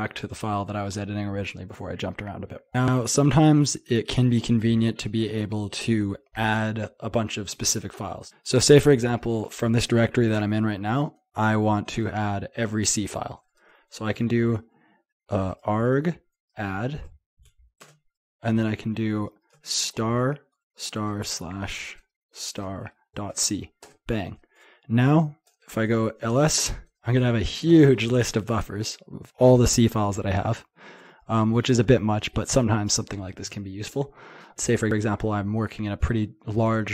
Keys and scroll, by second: 8.2 typing, 14.2 typing, 15.7-17.8 typing.